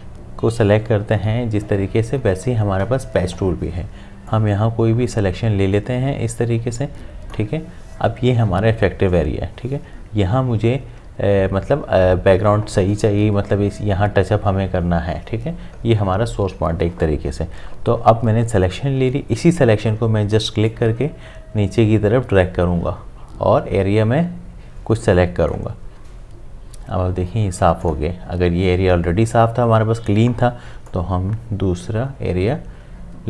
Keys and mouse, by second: 4.3 click, 4.3-9.6 drag, 20.7-27.8 drag, 30.9 click, 30.9-33.2 drag.